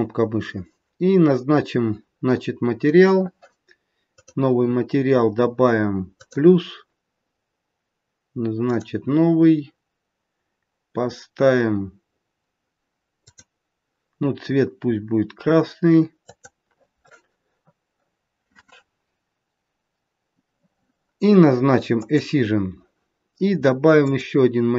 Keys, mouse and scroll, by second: 4.2 click, 6.1 click, 8.7 click, 13.3 click, 21.9 click, 24.0 click.